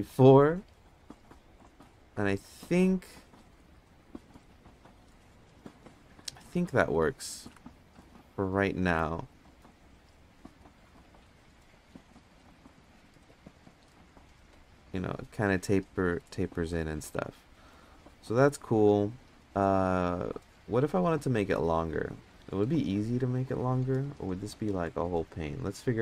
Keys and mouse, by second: 0.0 click, 7.3 ctrl+Tab, 8.2 ctrl+Tab, 11.2-12.5 middle drag, 15.7-16.2 middle drag, 17.0 Tab, 18.9 ctrl+Tab, 20.2 ctrl+Tab, 20.7 ctrl+Tab.